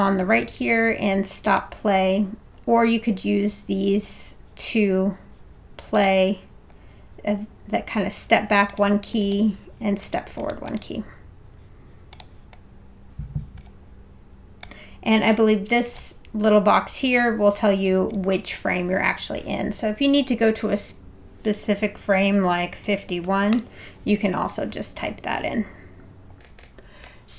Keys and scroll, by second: 22.8 5, 23.2 1, 23.5 Return.